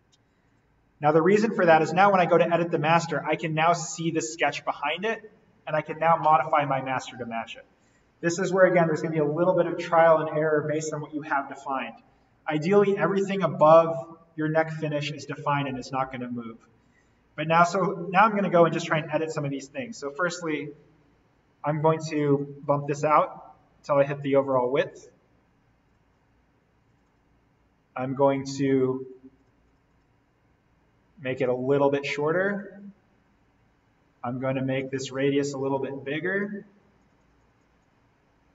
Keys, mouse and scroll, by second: 0.4 right click, 1.3 click, 2.5 scroll up 1, 3.0 scroll down 1, 4.5-5.5 scroll up 1, 7.0-7.5 scroll up 1, 7.5-9.3 scroll down 1, 12.3-15.2 scroll down 1, 15.2-15.6 scroll up 1, 16.8-17.8 scroll down 1, 17.8-18.7 scroll up 1, 18.7-19.6 scroll down 1, 19.6 click, 22.2 click, 29.4 click, 32.7 click, 33.0 scroll down 1, 34.7 click.